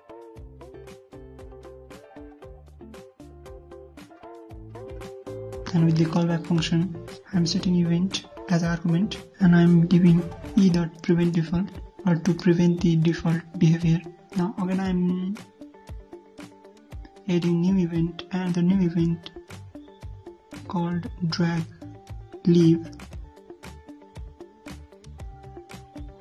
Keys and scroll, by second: 19.4 ctrl+c.